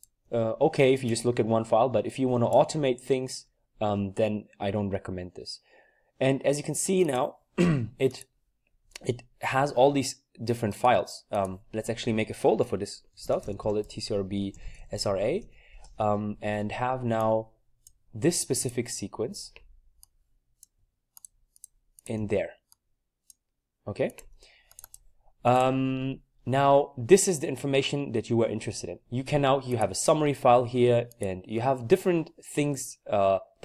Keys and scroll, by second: 12.9-15.7 typing.